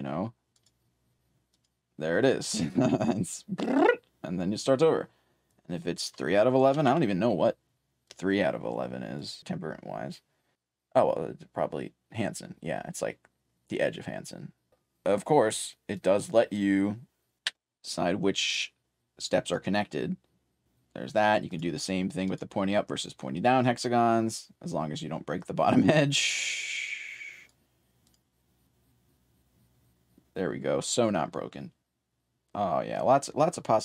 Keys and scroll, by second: 0.0-0.5 typing, 2.2 4, 5.4-9.9 typing, 15.6-23.4 typing, 25.9-28.5 typing, 30.6-31.7 typing.